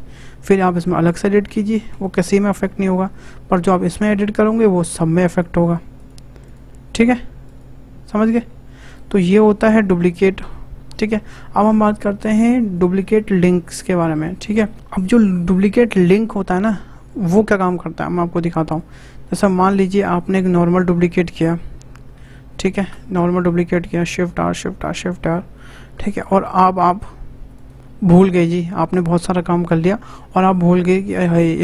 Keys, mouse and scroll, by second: 1.4 Tab, 1.9 Tab, 2.5 click, 3.6 Tab, 4.5 click, 5.3 click, 5.9 click, 6.4 click, 6.9 click, 7.4 click, 8.2 click, 10.4 Tab, 11.9 click, 13.7 Delete, 14.2 scroll down 1, 14.4-16.3 shift+middle drag, 18.6 click, 19.4-19.8 shift+middle drag, 19.8 click, 20.9 shift+d, 24.3 shift+r, 24.5 shift+r, 24.8 shift+r, 25.2-25.5 scroll down 4, 25.5 shift+middle click, 25.9-26.3 scroll up 2, 26.6 middle click, 27.5 click.